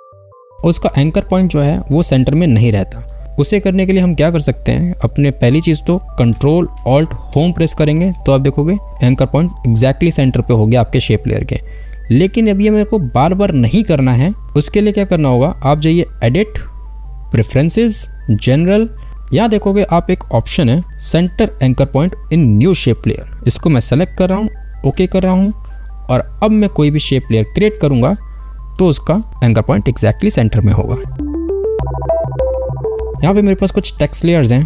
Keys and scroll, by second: 2.8 v.